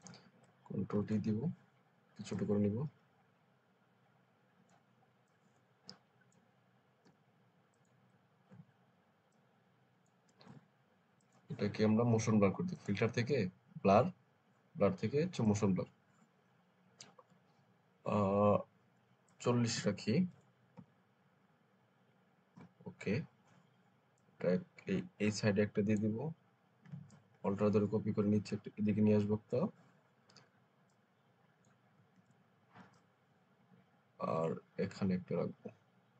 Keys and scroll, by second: 0.8 ctrl+t, 7.0 Return, 8.4 ctrl+t, 10.3 Return, 20.2 BackSpace, 20.6 0, 22.4 Return, 32.0 ctrl+z, 32.7 ctrl+alt+z.